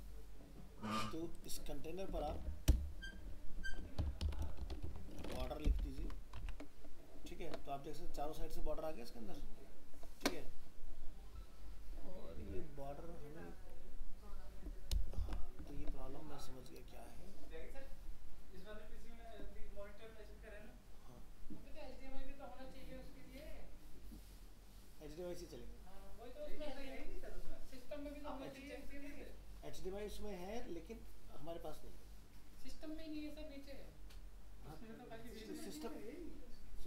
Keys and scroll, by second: 6.0 ctrl+s, 6.4 alt+Tab, 15.2 ctrl+0.